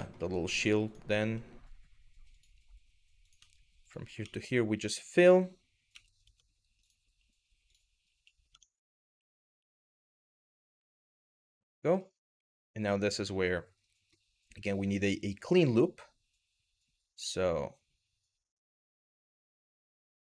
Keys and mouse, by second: 0.8 e, 1.9 click, 2.9 click, 4.4 d, 5.9 Tab, 6.4 click, 7.3 click, 8.1 Tab, 9.0 2, 10.4 f, 11.5 click, 12.1 shift+middle click, 15.3 click, 17.2 click.